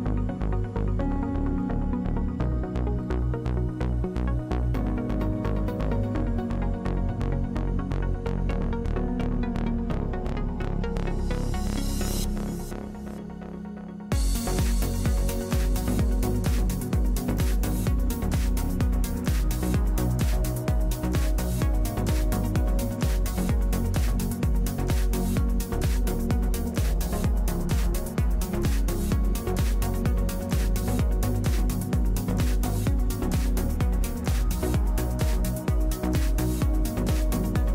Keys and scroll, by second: 15.5 e.